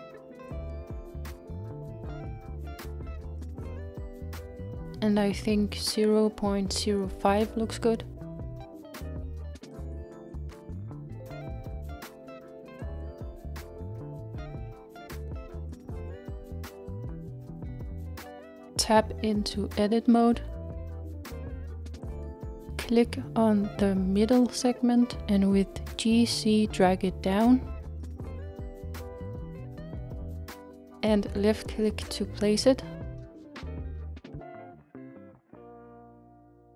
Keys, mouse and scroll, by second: 12.9-13.6 scroll down 2, 14.2-16.5 scroll up 2, 16.5 click, 19.3 Tab, 20.3-21.5 scroll up 3, 21.5-23.1 scroll down 2, 23.1 click, 25.5 g.